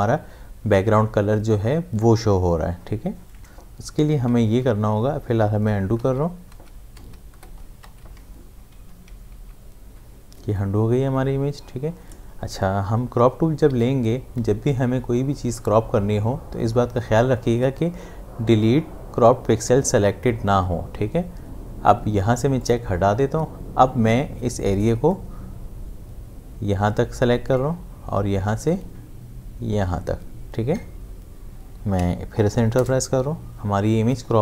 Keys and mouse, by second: 4.5 ctrl+z, 6.0 ctrl+z, 8.7 v, 9.3 ctrl+z, 13.7 c, 22.6 click, 25.1-33.1 drag.